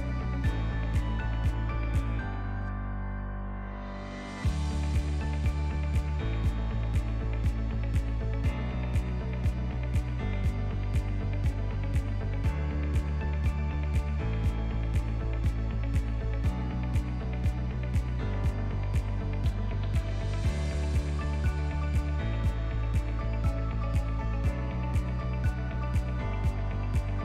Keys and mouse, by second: 0.4 s, 1.6 Tab, 2.1 a, 2.7 e, 5.2 KP_7, 6.0 shift+middle click, 6.5 shift+middle click, 7.0 ctrl+middle click, 7.6 shift+middle click, 8.0 ctrl+middle click, 8.6 s, 10.8 shift+middle click, 11.2 ctrl+middle click, 11.8 s, 13.0 shift+middle click, 13.1 shift+click, 13.8 2, 15.3 e, 17.2 click, 17.6 right click, 18.7-19.8 drag, 20.8 click, 21.8 ctrl+middle click, 22.4 shift+right click, 23.2 shift+click, 24.4 e.